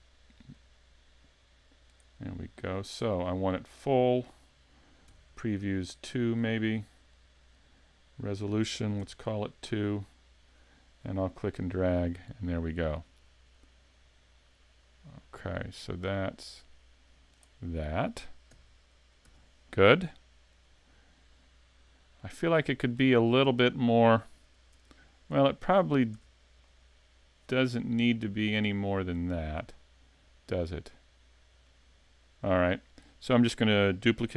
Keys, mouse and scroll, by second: 0.5 click, 2.8 click, 4.2 click, 7.1 click, 8.2 click, 11.7 click, 17.7 scroll up 3, 18.5 z, 19.3 z, 19.9 middle click, 20.6 scroll up 1, 20.7-22.3 scroll down 7, 22.3 middle click, 22.7 scroll up 5, 23.0 shift+middle click, 23.5 middle click, 23.9 scroll up 1, 24.7 Tab, 25.3 Tab, 26.1 a, 26.6 middle click, 27.6 scroll up 1, 27.8-28.2 scroll down 4, 28.2 middle click, 30.7 scroll up 1, 30.9 scroll down 2, 31.7 middle click, 32.9 right click.